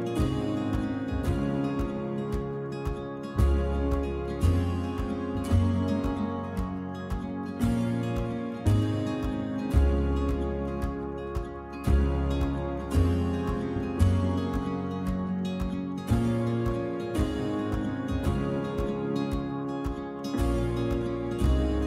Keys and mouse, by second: 0.7 click, 1.6 ctrl+t, 4.1-21.8 drag.